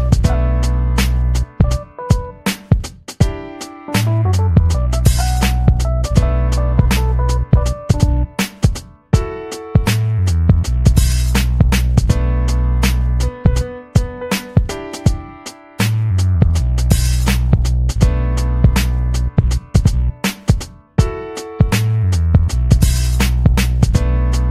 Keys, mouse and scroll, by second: 2.1-3.2 drag, 3.9 ctrl+click, 4.7-7.0 drag, 7.5 click, 7.8 click, 8.5-9.0 ctrl+scroll up 4, 9.4 click, 9.7-12.1 drag, 12.5-12.8 ctrl+scroll up 4, 14.3 click, 15.1 click, 15.6 ctrl+z, 16.6 click, 17.7-18.1 ctrl+scroll up 4, 18.9-19.5 ctrl+scroll up 4, 19.8-20.3 ctrl+scroll up 4, 21.0 click, 21.6 ctrl+scroll up 2, 21.9 ctrl+click, 22.3 ctrl+scroll down 1, 24.2 click.